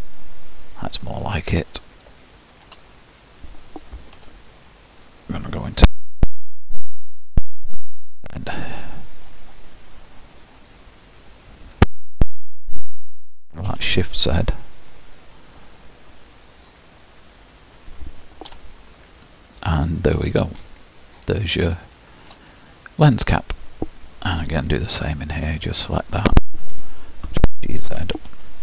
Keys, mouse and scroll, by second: 1.2-2.2 scroll down 3, 2.2 shift+middle click, 2.9-3.7 scroll down 1, 4.5 Tab, 6.5 alt+click, 8.1 e, 12.4 ctrl+KP_Add, 13.7 s, 18.7 Tab, 20.0-21.0 middle drag, 21.0-21.7 scroll down 5, 21.7-23.9 shift+middle drag, 23.9-25.0 scroll up 1, 25.0 scroll up 1, 25.2 Tab, 26.8 alt+click, 28.1 g.